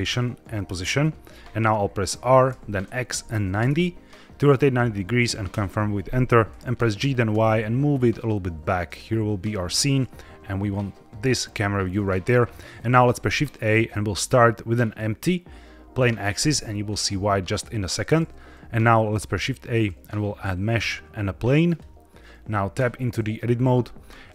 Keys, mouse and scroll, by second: 2.4 r, 2.8 x, 3.5 KP_9, 3.6 KP_0, 5.4 KP_Enter, 6.9 g, 7.2 y, 8.8 click, 13.0 shift+a, 19.0 shift+a, 22.8 Tab, 23.3 middle click, 23.9 scroll up 1.